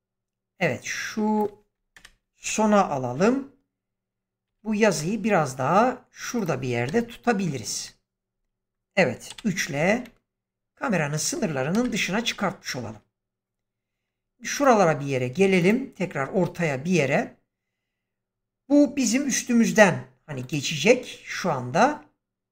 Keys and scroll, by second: 1.9 shift+Right, 4.4 g, 6.8 0, 9.2 3, 9.8 g, 11.7 0.